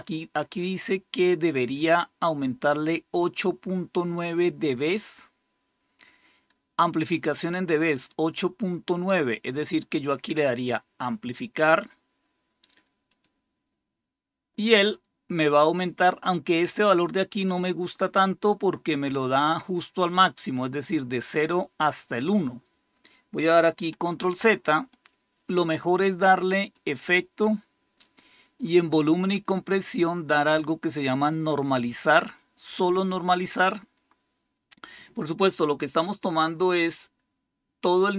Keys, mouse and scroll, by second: 13.0 click, 24.1 ctrl+z, 26.6 click, 36.8 click.